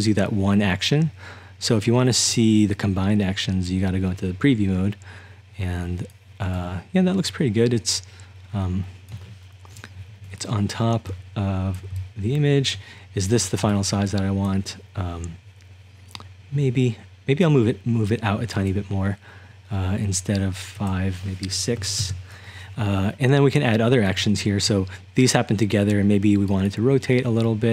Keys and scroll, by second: 9.7 1, 11.1-15.0 typing, 21.8 6, 22.0 Return.